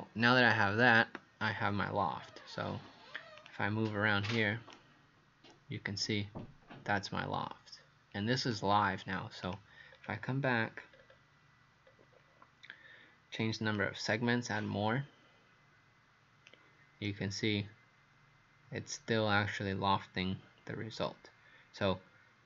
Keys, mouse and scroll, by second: 4.8 right click, 9.4 click, 9.9-10.6 scroll down 4, 11.0-11.5 scroll up 1, 11.9 scroll up 1, 13.9 click, 17.1 right click.